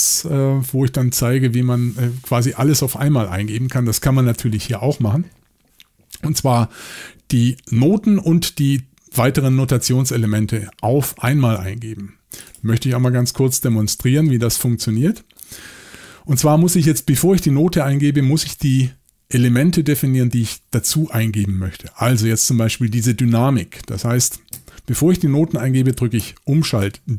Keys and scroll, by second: 13.6 Left, 13.8 Left, 14.0 Left, 14.2 Left, 26.8 shift+d.